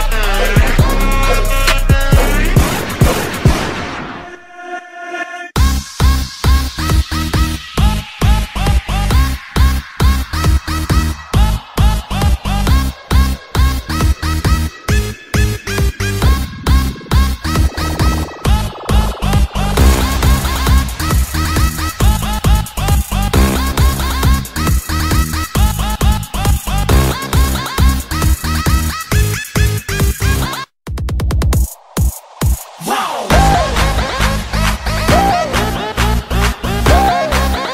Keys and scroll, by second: 0.5 space, 4.5 ctrl+z, 6.7 ctrl+z, 7.5 ctrl+z, 7.6 ctrl+z, 7.9 ctrl+z, 12.0 ctrl+z, 13.4 ctrl+z, 13.6 ctrl+z, 13.8 ctrl+z, 14.0 ctrl+z, 15.3 ctrl+z, 16.0 ctrl+z, 16.2 ctrl+z, 16.5 ctrl+z, 17.5 space, 25.7 ctrl+z, 26.0 ctrl+z, 26.7 ctrl+z, 27.1 ctrl+z, 27.5 ctrl+z, 28.1 ctrl+z, 28.3 ctrl+z, 29.6 ctrl+z, 31.0 ctrl+z, 32.1 ctrl+z, 35.8 ctrl+z.